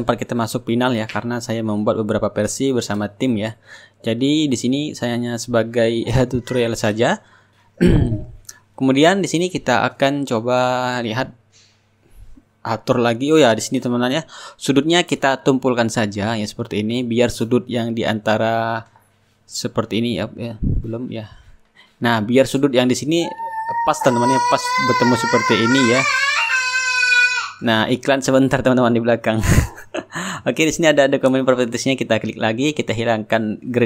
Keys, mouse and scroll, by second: 1.0 click, 1.2 click, 1.3 ctrl+z, 1.4 click, 1.8 click, 1.9 Return, 2.2 click, 2.6-7.0 drag, 2.9-7.0 shift+right drag, 9.4-11.8 drag, 10.4 right click, 13.4-15.0 middle drag, 16.6 click, 18.1-20.2 drag, 18.6 middle click, 20.7-24.7 shift+right drag, 24.7 shift+click, 26.4-27.9 right drag, 29.5 click, 31.3 click.